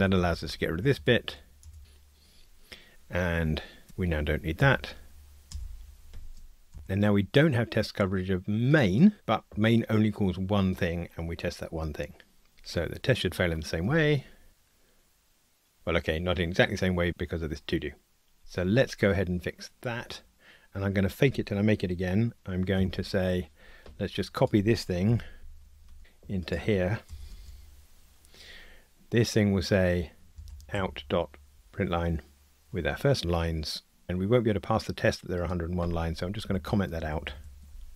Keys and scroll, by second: 3.3 F2, 6.1 super+Page_Up, 13.8 ctrl+r, 22.8 shift+super+F12, 25.2 alt+Up, 26.0 super+c, 32.6 Return, 37.7 super+/.